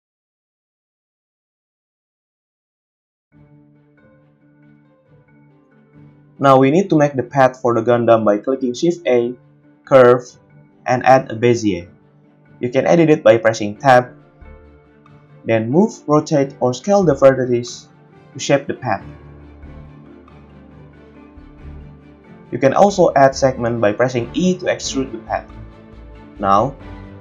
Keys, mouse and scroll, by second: 1.7-5.6 drag, 3.0 g, 5.6-14.2 shift+middle drag, 7.4 shift+a, 13.5 Tab, 14.2 Tab, 14.8 Tab, 15.4 g, 15.9 click, 16.1 g, 16.5-18.9 drag, 17.5 r, 19.2 r, 19.9 g, 20.8 Tab, 21.3 g, 23.5 e, 25.7 e, 27.1 click.